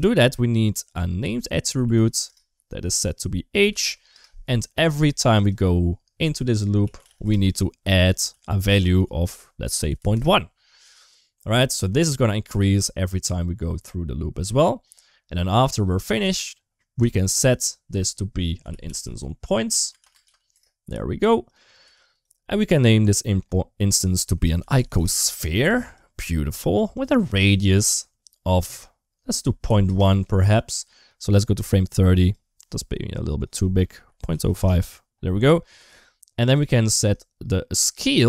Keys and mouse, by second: 0.4-2.9 drag, 3.3 click, 4.6 shift+a, 8.1 g, 8.9-10.0 drag, 14.0 middle click, 14.4 middle click, 16.0 shift+a, 21.7 g, 22.4 middle click, 23.5-25.8 drag, 26.8-29.7 drag, 31.4 click, 33.2-34.4 drag, 37.8 shift+middle click.